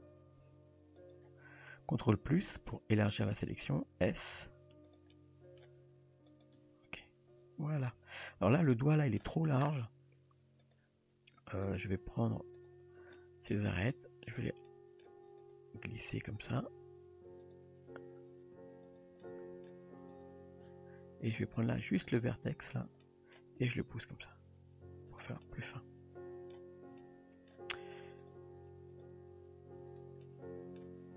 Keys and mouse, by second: 0.4 s, 2.5 ctrl+KP_Add, 4.1 s, 5.1-5.6 middle drag, 5.8 g, 6.6 Tab, 7.8 Tab, 8.7-9.2 middle drag, 10.6 click, 11.7 click, 13.2 middle drag, 13.7 g, 14.7-15.1 middle drag, 15.5 click, 16.0 g, 16.9 r, 17.9 r, 19.2-19.7 middle drag, 20.1 drag, 21.4 click, 22.1 click, 23.1 middle click, 23.7 g, 25.4-26.6 middle drag, 27.0-27.6 middle drag, 28.3 click, 29.0 click, 30.3-30.8 middle drag.